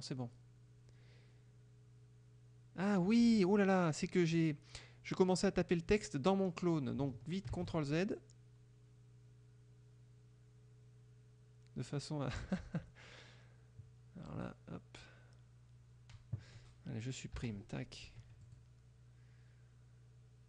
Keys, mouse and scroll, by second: 7.6 ctrl+z, 14.3 click, 17.1 Delete, 18.5 click.